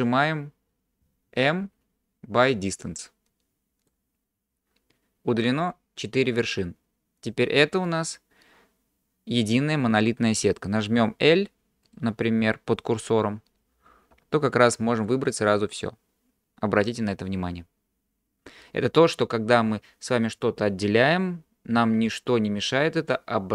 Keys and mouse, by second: 1.6 m, 8.0 click, 11.9 click, 14.2 l.